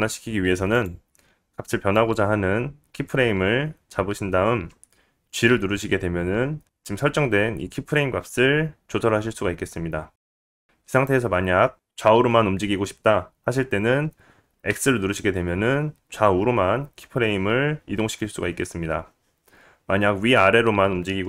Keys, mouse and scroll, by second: 3.2 click, 6.7 g.